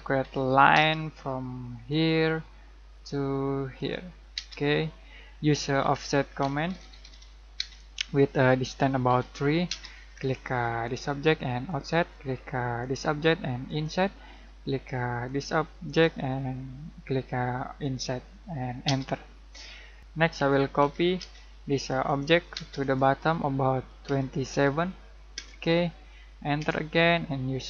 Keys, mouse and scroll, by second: 0.2 l, 0.7 space, 1.8 click, 2.5-3.7 scroll up 1, 3.7 click, 4.3 space, 4.6-4.9 scroll down 1, 4.9 middle click, 5.8-7.5 typing, 9.0 3, 9.6 space, 10.8 click, 14.3-15.0 scroll down 1, 15.2 click, 18.8 space, 19.4 scroll up 1, 20.3-21.1 typing, 21.7 click, 22.5 space, 22.8 click, 24.0 2, 25.3 Return, 27.4-27.6 typing.